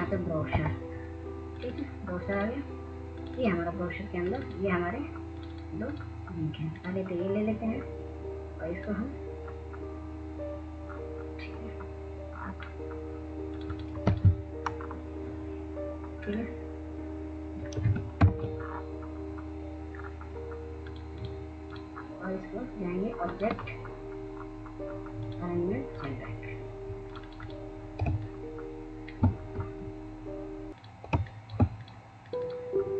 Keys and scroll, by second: 2.9 b, 20.5 ctrl+shift+[.